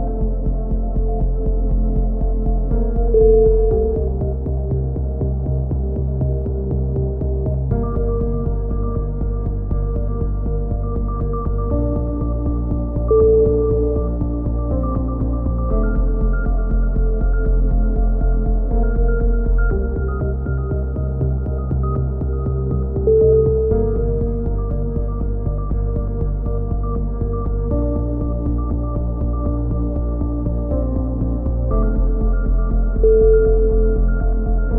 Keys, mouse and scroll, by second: 0.3 z, 0.8 click, 2.6 z, 3.2 click, 4.1 right click, 4.1 z, 5.3 v, 5.7 z, 6.2 click, 7.8 KP_1, 8.4 click, 8.8 z, 9.6-11.1 drag, 11.3-12.9 drag, 13.4 KP_1, 15.7 middle click, 16.2-20.3 drag, 18.0-19.2 middle drag, 19.2 shift+q, 19.5 middle click, 19.6 a, 20.1 middle click, 23.5-24.5 middle drag, 24.5 click, 25.4 click, 25.5-26.7 right drag, 26.4 f, 26.6 a, 26.7 middle click, 27.1-28.2 drag, 28.6-30.4 right drag, 30.2-31.7 drag, 31.9 ctrl+KP_7, 33.6 g.